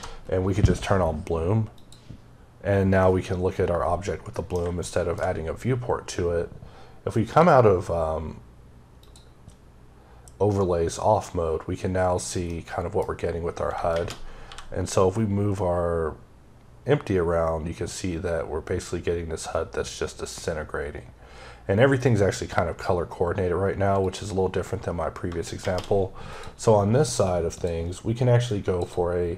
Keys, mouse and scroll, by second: 1.6 click, 2.8 middle click, 4.4 scroll down 1, 4.6 shift+middle click, 5.3 scroll up 1, 7.1 click, 8.0-8.8 scroll down 2, 12.3 middle click, 14.2 scroll up 1, 14.3 g, 23.9 click, 24.3-25.0 scroll up 2, 26.2 click, 27.4 click, 28.3 click, 28.8 double click.